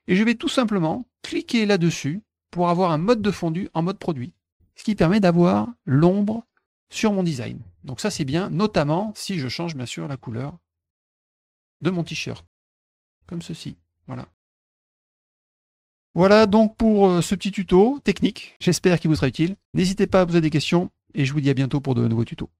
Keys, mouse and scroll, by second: 2.5 click, 4.2 click, 4.9 middle click, 5.1 middle click, 5.3 middle click, 8.8 middle click, 10.1 click, 10.9 click, 11.4 click, 12.7 click, 13.1-15.1 drag, 15.3 click, 15.6 click, 15.9 click, 17.2 middle click, 17.7 middle click, 18.5 middle click.